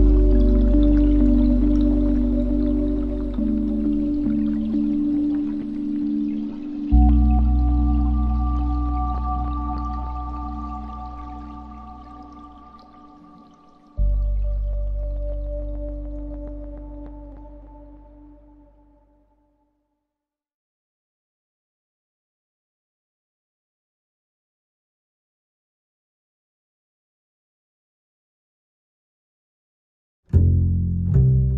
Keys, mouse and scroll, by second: 0.7 click, 2.2 click, 3.2-4.6 drag, 4.6 KP_0, 10.0 click, 11.1 scroll down 4, 11.4-15.0 middle drag, 15.0-17.9 shift+drag, 20.2 scroll down 5, 20.4-24.9 middle drag, 24.9-27.9 shift+drag, 28.0-30.3 ctrl+right drag, 30.3-31.5 middle drag.